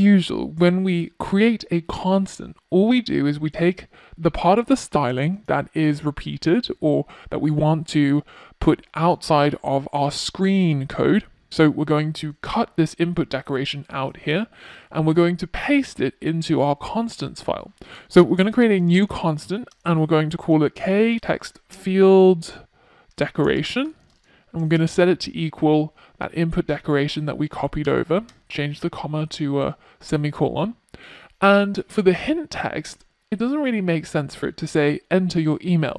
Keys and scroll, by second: 10.7 super+x, 23.5 super+v.